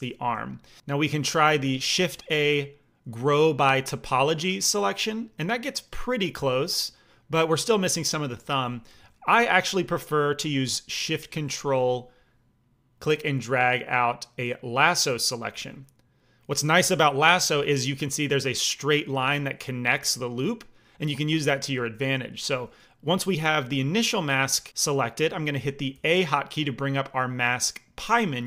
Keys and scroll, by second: 2.3 shift+a, 8.8 alt+m, 25.9 a.